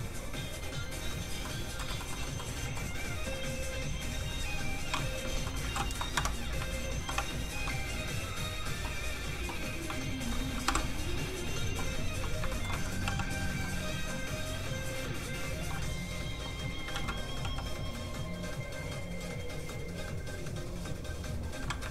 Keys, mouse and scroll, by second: 1.4 middle click, 1.9 shift+middle click, 2.1 middle click, 5.1 click, 6.1 Escape, 7.0 alt+i, 10.6 i, 12.5 shift+middle click, 12.7 middle click, 12.8 middle click, 13.0 f, 13.2 click, 13.6 middle click, 14.9 click, 16.9 ctrl+z, 17.4 z, 17.5 f, 17.7 click.